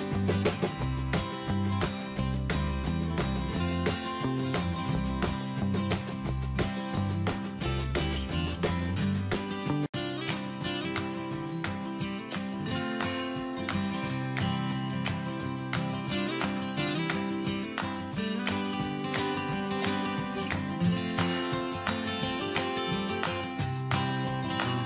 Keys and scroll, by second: 0.7 ctrl+c, 4.4 ctrl+v, 5.2 Escape, 18.9 ctrl+a, 20.4 Return, 23.6 Escape.